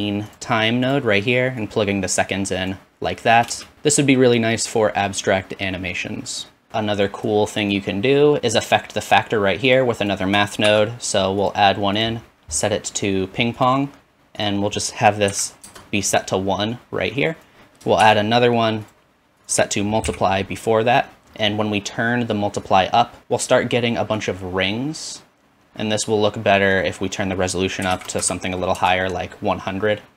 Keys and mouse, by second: 3.5 space, 9.8 click, 10.7 shift+d, 11.9-18.1 drag, 18.0 shift+d, 19.1 click, 23.2-24.2 drag, 28.2 KP_0.